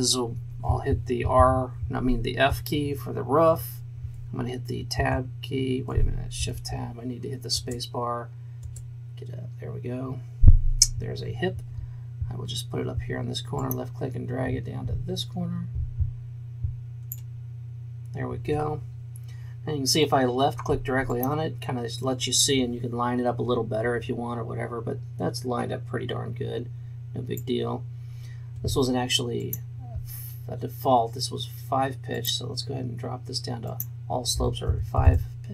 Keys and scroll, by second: 2.6 f, 5.1 Tab, 6.5 shift+Tab, 7.5 space, 34.8 KP_5, 35.0 Return.